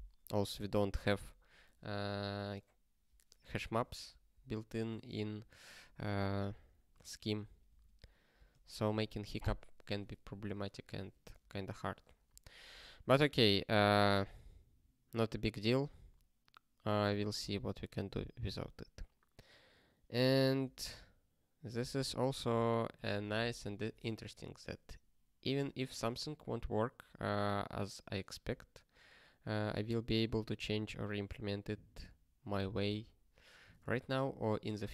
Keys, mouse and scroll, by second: 7.7 ctrl+space, 7.7 ctrl+a, 8.5 ctrl+g, 14.1 ctrl+n, 20.6 ctrl+space, 20.7 ctrl+n, 21.6 ctrl+n, 22.9 ctrl+g.